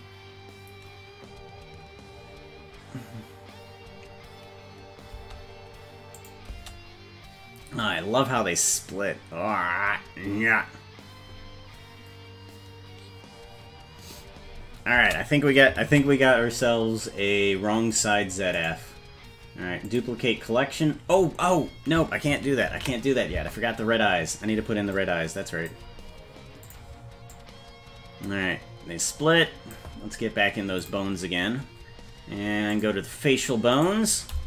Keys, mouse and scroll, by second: 5.2 space, 6.2 click, 6.5 space, 15.0 space, 16.1 ctrl+s, 17.9 click, 18.6-20.1 right drag, 23.3 ctrl+z, 25.0 click, 26.7 click, 27.3-29.8 drag, 30.8 click, 32.7 click, 33.8 right click.